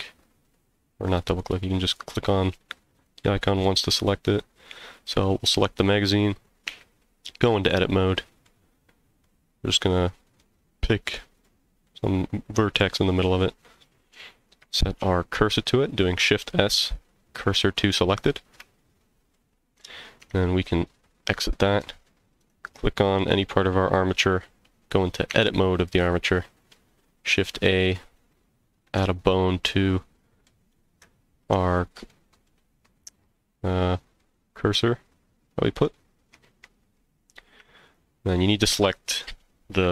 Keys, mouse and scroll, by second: 1.1 click, 2.1 click, 2.9 click, 4.2 click, 4.9 click, 6.7 Tab, 7.2-7.5 scroll up 2, 7.7 middle click, 8.8 scroll down 1, 9.2-10.4 middle drag, 11.4 click, 11.8 middle click, 13.2 scroll down 2, 13.6 middle click, 15.0 shift+s, 19.3 middle click, 20.2 Tab, 22.4 click, 25.3 Tab, 27.2 shift+a, 28.5 scroll up 1, 29.0-30.5 middle drag, 32.1 middle click, 33.3 middle click, 33.8-34.2 scroll down 2, 34.2 middle click, 35.5 middle click, 36.0 scroll up 1, 36.4 middle click, 37.8 shift+click.